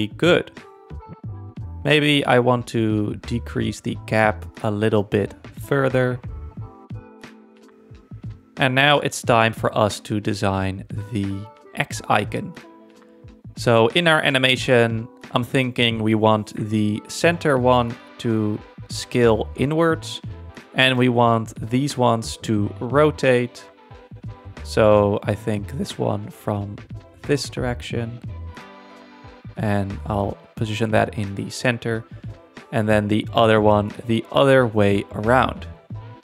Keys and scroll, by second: 4.7 4, 4.9 Return, 8.4 z.